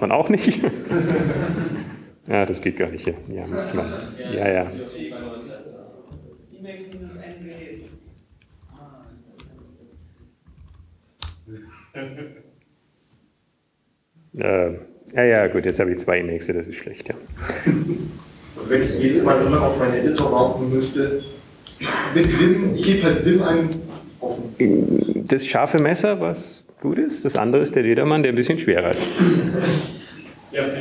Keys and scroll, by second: 4.5 super+Left, 4.6 super+Return, 6.6 Return, 6.6 typing, 8.4 super+q, 10.4 super+q, 11.0 super+Return, 11.2-14.2 typing, 15.8-17.3 typing, 24.7 alt+`, 28.9 super+Right.